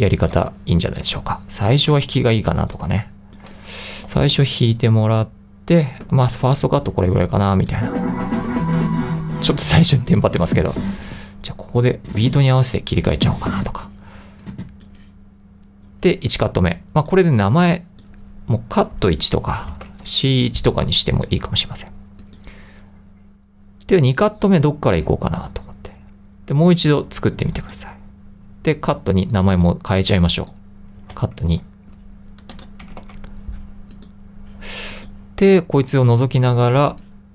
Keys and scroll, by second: 0.0-4.2 typing, 19.0-20.4 typing, 31.1 c, 31.5 2, 32.6-33.6 typing, 37.0-37.3 typing.